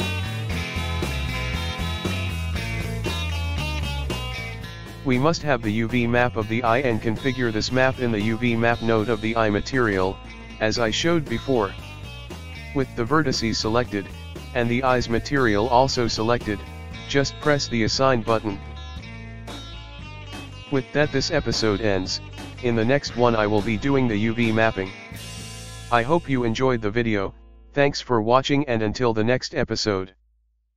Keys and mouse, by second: 1.4 l, 3.9 click, 5.3 click, 11.6 click, 13.3 click, 13.9 click, 16.9-20.9 drag, 20.9-25.1 ctrl+middle drag, 25.1 click.